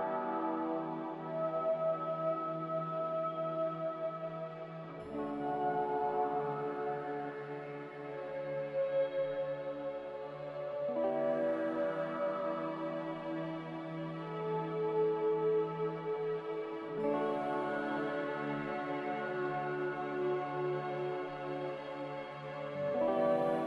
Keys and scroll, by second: 5.5 3, 10.7 2, 19.7-20.2 typing, 20.3 Return, 23.0 z.